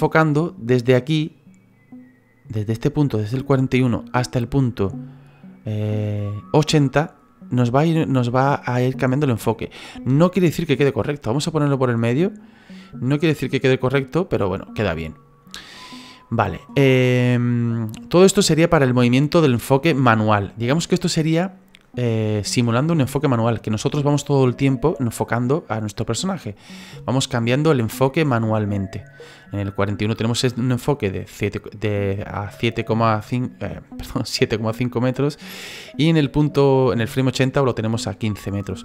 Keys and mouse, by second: 1.2 click, 3.8 click, 11.5 click, 13.0 click, 14.7 click, 16.0 click, 17.6 click, 18.6 click, 19.4 click, 26.9 click, 35.3 click.